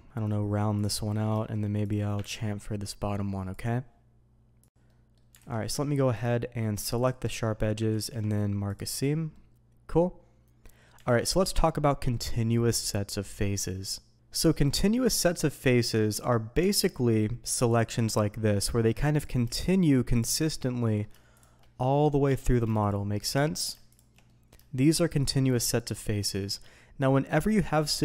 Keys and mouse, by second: 0.7 click, 1.0 middle click, 1.4 shift+middle click, 1.8 click, 2.3 ctrl+b, 3.5 click, 4.8 middle click, 5.4 alt+a, 6.2-7.0 drag, 7.9 ctrl+e, 9.3-10.6 middle drag, 11.0 alt+a, 14.7-15.0 middle drag, 16.6 Tab, 17.6 alt+click, 18.1-18.7 middle drag, 19.1 click, 19.6 shift+click, 20.5-21.0 middle drag, 21.3 shift+drag, 21.8 middle click, 22.3 Escape, 23.4 middle click, 24.2 middle drag, 24.9-25.2 shift+drag, 25.9 shift+drag, 26.3 middle click.